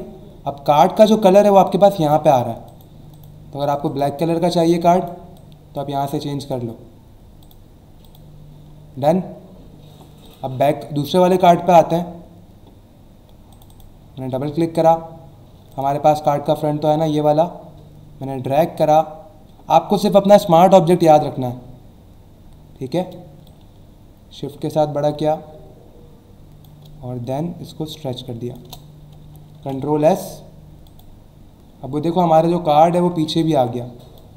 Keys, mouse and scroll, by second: 0.9-1.3 scroll down 1, 2.0 click, 2.7 click, 3.1 click, 3.6 click, 4.6 click, 7.4 click, 8.0 click, 8.7 alt+scroll down 1, 10.2 click, 11.9-12.2 scroll down 1, 13.5 click, 15.7 click, 16.9 click, 20.9 click, 23.5 click, 27.3 click, 28.6 Return, 29.5 ctrl+s, 30.9 click, 31.9 alt+scroll down 1, 32.4 alt+scroll up 1, 33.3 space, 33.4 click, 33.8 space.